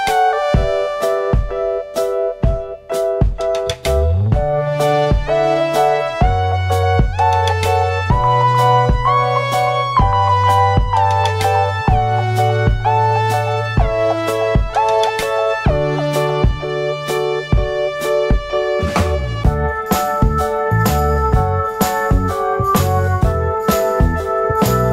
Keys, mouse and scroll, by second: 0.4 click, 0.5 click, 2.9 middle click, 3.0 scroll down 1, 3.8 ctrl+a, 5.2 right click, 5.3 right click, 7.5 click, 8.1 middle click, 8.6 middle click, 8.6 scroll up 1, 9.1 click, 9.2 click, 11.7 click, 11.8 click, 13.2 click, 13.7 click, 14.4 click, 14.5 click, 15.2 middle click, 16.1 middle click, 16.1 scroll down 1, 17.2 middle click, 17.6 scroll up 1, 19.2 middle click, 19.4 F4, 21.1 click, 21.2 click, 22.3 alt+middle click.